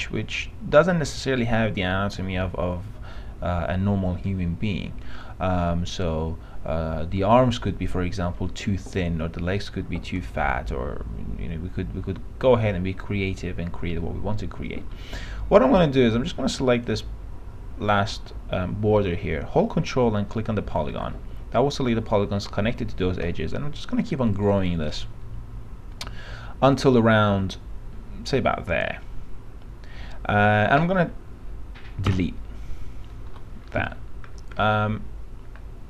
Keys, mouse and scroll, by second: 24.3 click, 32.3 Delete, 33.4 p, 33.9 middle click, 34.4 scroll down 1, 34.8-35.8 alt+middle drag.